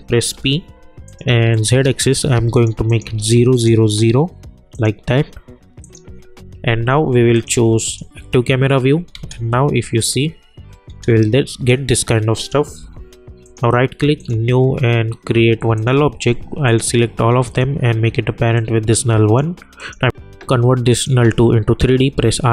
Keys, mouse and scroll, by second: 0.3 p, 1.1 click, 9.1 space, 11.3 click, 12.7 u, 13.4 right click, 14.2 click, 17.4 shift+click, 18.8 click, 21.9 r.